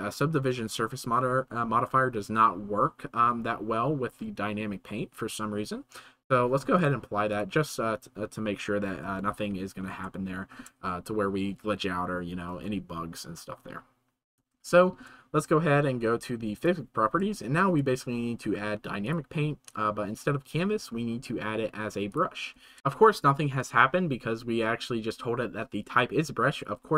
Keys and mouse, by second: 6.8-7.4 drag, 10.3-10.6 shift+middle drag, 14.7 shift+middle click, 16.6 click, 17.3-17.6 shift+middle drag, 19.0 click, 20.4-22.2 drag.